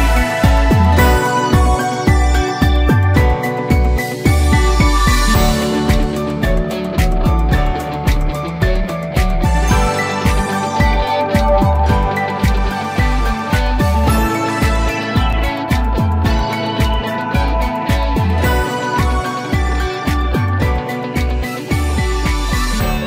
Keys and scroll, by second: 21.2 ctrl+z.